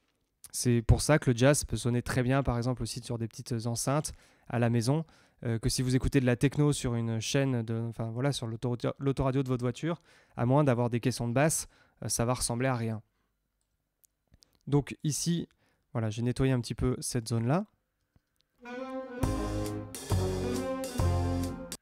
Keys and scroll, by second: 17.9 space, 21.7 space.